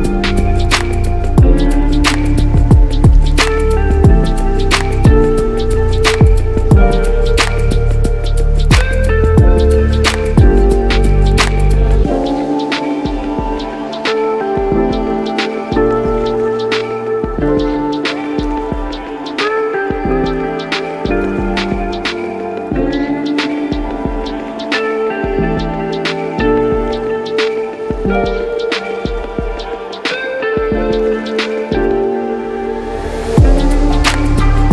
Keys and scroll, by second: 0.0 ctrl+shift+z, 0.8 ctrl+shift+z, 14.3 b, 21.4 x, 29.2 x.